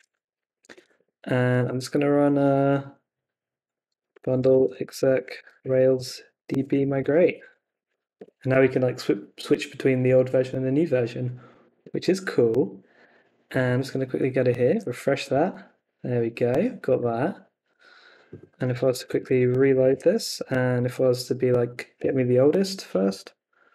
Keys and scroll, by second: 0.9 super+Tab, 3.8-8.4 typing, 11.8 super+Tab, 14.7 super+r, 16.9 super+Tab, 18.4-20.2 typing, 20.4 Up, 22.0 Return.